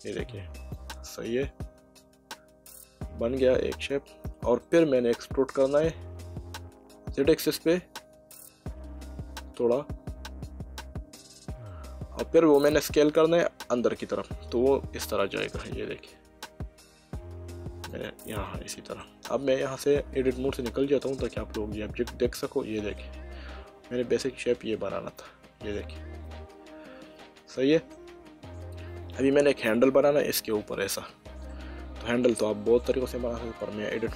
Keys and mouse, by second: 0.6 click, 1.1 middle click, 5.6 e, 7.2 z, 11.2 click, 13.5 s, 17.9 click, 18.4 middle click, 20.5 Tab, 21.1 middle click, 29.2 middle click, 31.5 middle click, 33.6 Tab.